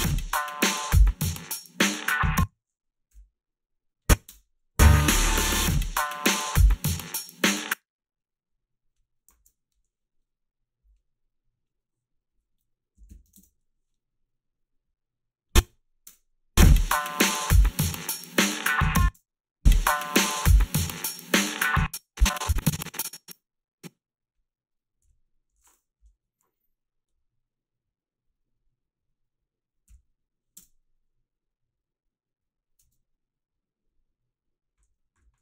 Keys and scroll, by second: 2.2 space, 3.1 ., 4.3 space, 7.5 space, 9.4 alt+shift+s, 12.7-13.7 typing, 16.0 space, 18.8 space, 19.1 space, 21.5 space, 25.1 g, 26.0 Delete, 29.9 f, 30.6 space, 32.8 space.